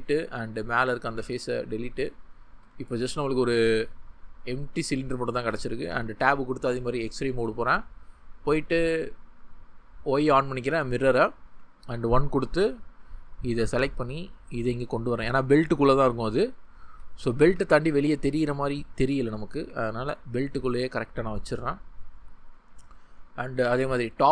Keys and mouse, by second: 1.2 x, 2.6 Tab, 2.9-4.2 drag, 11.5 1, 13.6 g, 15.7 click, 17.4 g, 20.9 click.